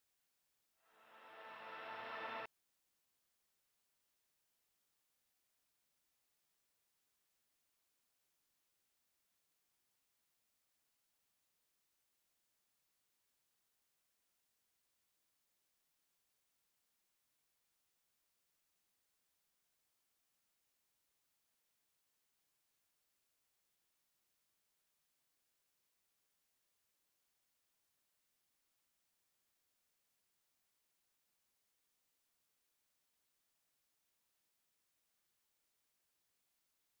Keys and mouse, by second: 1.2-3.8 typing, 1.6 ctrl+click, 2.3 click, 3.5 click, 5.0-5.7 typing, 6.5 click, 10.4 space, 10.5 click, 11.7-13.4 typing, 12.0 click, 12.7 click, 13.8 ctrl+z, 14.4 click, 18.4-20.5 typing, 20.1 ctrl+alt+click, 20.6 click, 32.8 right click, 35.0 click.